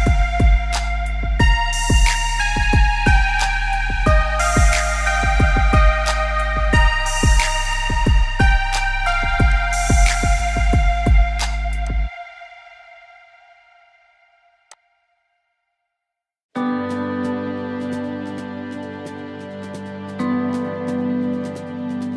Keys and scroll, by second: 15.9 ctrl+=, 16.1 ctrl+=, 20.4 b.